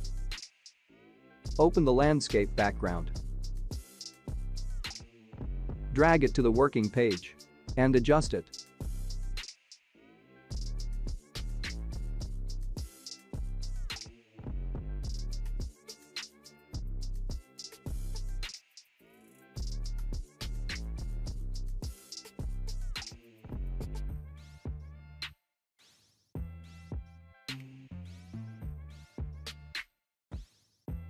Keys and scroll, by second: 8.8 ctrl+t.